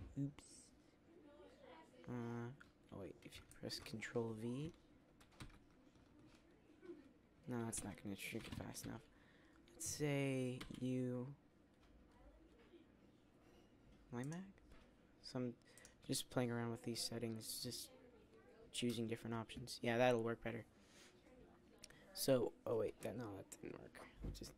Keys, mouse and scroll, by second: 5.9 ctrl+v, 10.5 u.